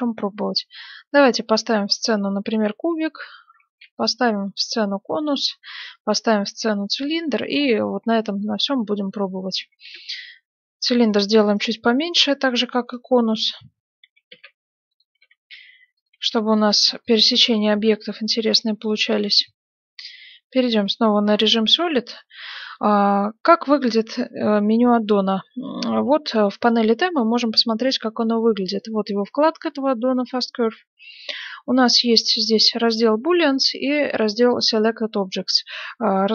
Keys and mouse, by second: 3.5 shift+a, 9.0-11.0 drag, 11.0-12.3 right drag, 12.3 z, 14.0 s, 15.0 s, 16.1 g, 18.2 middle click, 18.7 Tab, 19.8 z, 23.3-27.0 middle drag, 27.0-36.3 drag.